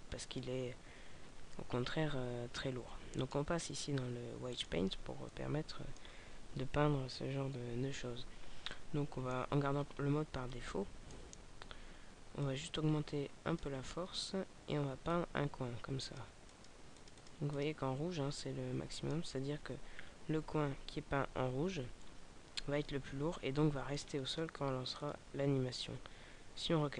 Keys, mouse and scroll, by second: 4.6 click, 5.4 middle click, 8.7 middle click, 9.7-10.2 scroll up 4, 10.4 shift+middle click, 12.4 click, 15.1-18.7 click, 22.0 middle click, 24.9 click, 26.6 scroll down 2, 26.7 scroll up 1.